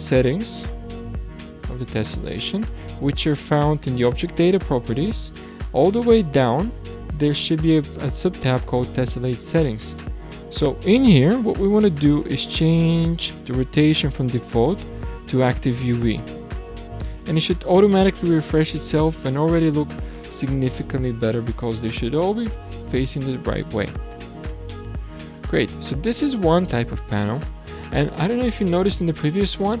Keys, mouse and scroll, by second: 0.2-0.7 scroll down 7, 2.6-5.6 drag, 6.0-6.4 scroll up 10, 9.7-10.0 scroll down 3, 11.4 scroll down 2, 14.5-17.6 drag, 18.0-18.6 scroll down 3, 18.6-21.6 middle drag, 29.0-29.8 scroll up 6, 29.5-29.8 middle drag.